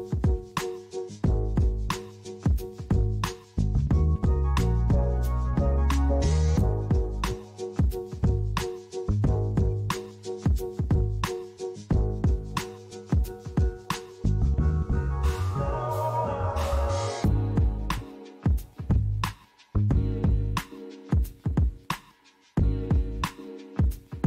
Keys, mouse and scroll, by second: 0.6 right click, 1.1 middle click, 2.0 ctrl+r, 2.3 middle click, 2.9 right click, 3.3 middle click, 4.2 ctrl+r, 5.2 right click, 5.8 middle click, 7.9 click, 9.2 click, 10.9 KP_1, 12.5 click, 13.3 click, 15.8 click, 17.2 click, 20.0 middle click.